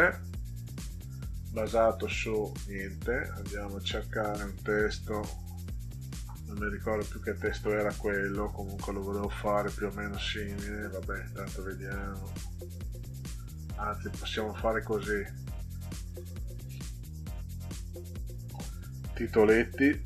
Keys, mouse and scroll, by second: 0.8 click, 2.6 click, 3.8 click, 5.8 click, 18.2 click.